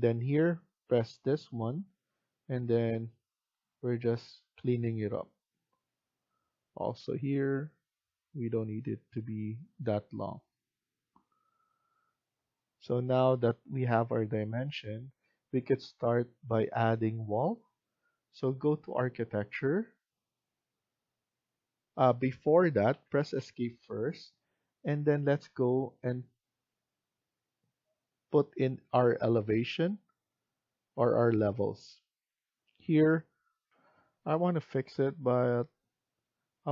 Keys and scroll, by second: 22.8 Escape, 23.2 Escape, 33.6 F1.